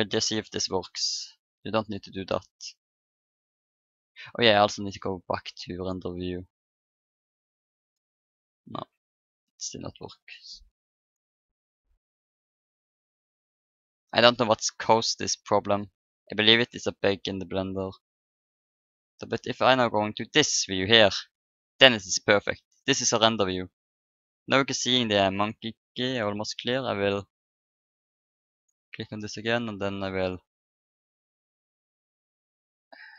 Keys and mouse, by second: 0.8 click, 1.4-3.4 drag, 3.8 click, 4.9-6.6 drag, 6.7-8.6 drag, 8.3-10.1 middle drag, 11.0-12.8 right drag, 11.9 click, 14.1-16.6 middle drag, 16.9-18.8 middle drag, 19.7-21.4 drag, 22.2-24.5 middle drag, 26.3-27.8 middle drag, 27.8-29.8 drag, 28.7 right click, 29.8 right click, 32.1-33.1 drag.